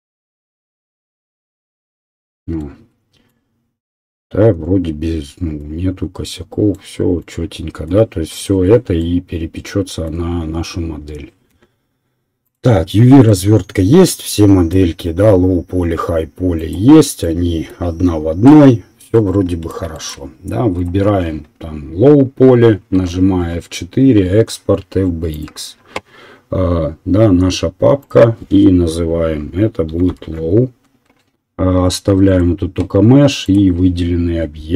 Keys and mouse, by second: 11.7-16.6 middle drag, 16.6 click, 17.0-20.7 middle drag, 20.7 click, 21.1-27.4 middle drag, 23.4 F4.